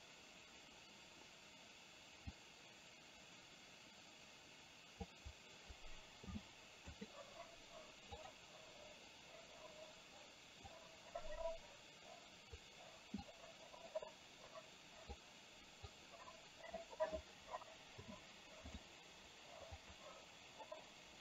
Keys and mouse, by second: 2.5-5.1 drag, 6.2 i, 10.7 click, 11.0-12.7 drag, 13.4-15.2 drag, 16.0 click, 18.1 i, 19.8 click.